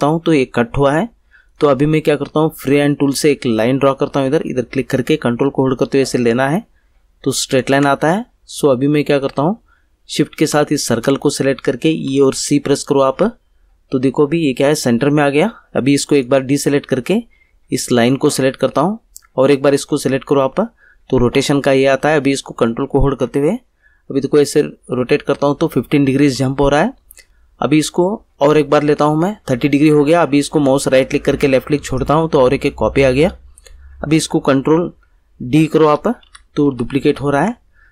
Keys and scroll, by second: 12.0 e, 12.3 c, 35.8 ctrl+d.